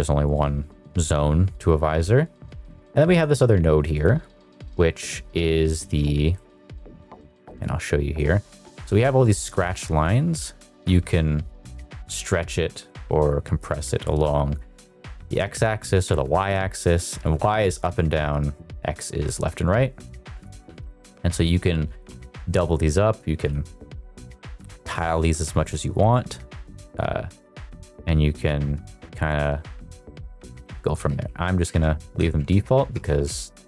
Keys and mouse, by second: 2.5 middle click, 3.1 click, 6.3 shift+middle click, 7.0 click, 8.7 shift+middle click, 9.9-14.3 drag, 15.3-16.8 drag, 18.4 click, 20.0 click, 21.6 click, 22.9 click, 24.6 click, 25.6 click, 27.4-29.8 drag, 30.3 ctrl+click, 30.7 ctrl+z, 31.2 ctrl+z, 31.8 ctrl+z, 32.4 ctrl+z, 33.2 ctrl+z.